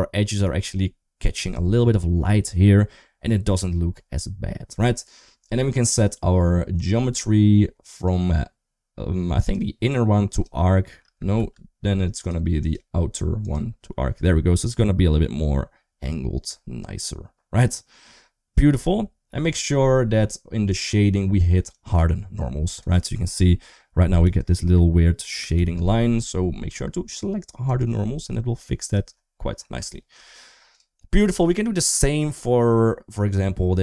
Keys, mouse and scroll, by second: 6.6 click, 9.2-10.3 drag, 11.2 ctrl+z, 12.1 click, 12.4-13.4 drag, 20.5 click, 21.6 click, 24.1 d, 24.2 click, 25.1 d, 25.4 ctrl+z, 27.5 click, 29.8 shift+middle click, 30.5 click, 31.8 click, 33.1 middle click.